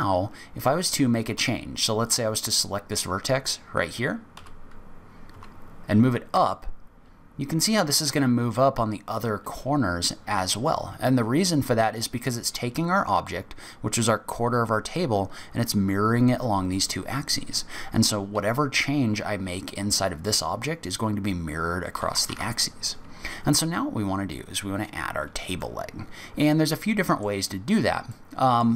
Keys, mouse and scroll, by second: 1.3 1, 2.0 click, 4.3 g, 22.3 ctrl+z, 25.6 middle click, 28.1 middle click.